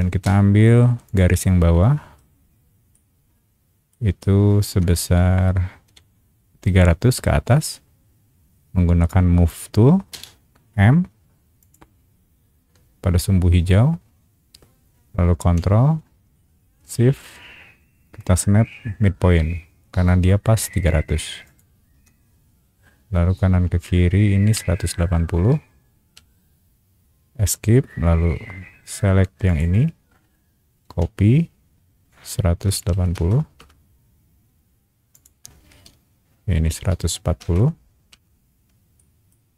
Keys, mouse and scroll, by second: 0.0 space, 1.0 click, 2.9 shift+middle click, 4.2 shift+middle click, 5.8 m, 10.1 m, 11.6 click, 21.4 shift+click, 26.0 Escape, 29.4 click, 32.6 KP_1, 32.9 KP_8, 33.1 KP_0, 33.6 KP_Enter, 35.1 click, 36.9 KP_1, 37.1 KP_4, 38.1 KP_Enter, 39.0 shift+middle click.